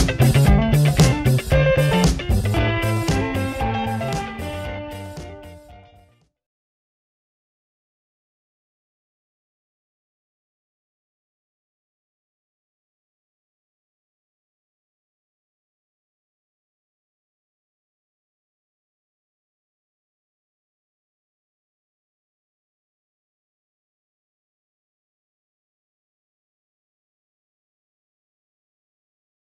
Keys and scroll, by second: 7.9 ctrl+z, 20.7 m, 22.7 Delete, 24.7 b.